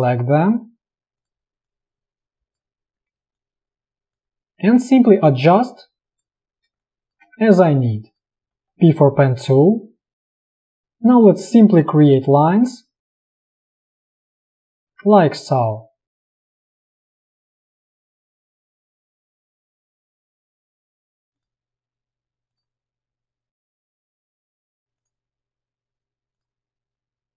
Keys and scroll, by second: 6.8 space, 8.6 p, 21.0 space.